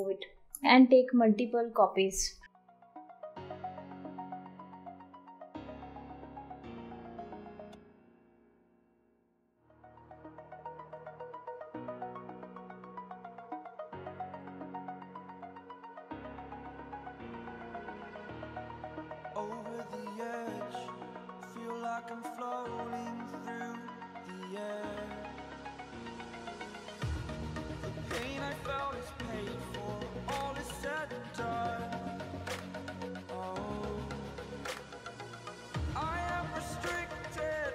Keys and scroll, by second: 3.0 Delete, 4.2 ctrl+t, 8.6 ctrl+t, 17.7 ctrl+t, 19.3 ctrl+t, 20.9 Up, 21.0 Left, 21.1 Left, 21.1 Left, 21.2 Left, 22.3 ctrl+t, 25.3 ctrl+t, 26.5 ctrl+t, 28.2 ctrl+t, 32.1 ctrl+t, 33.9 ctrl+t, 35.1 ctrl+t, 37.4 ctrl+t.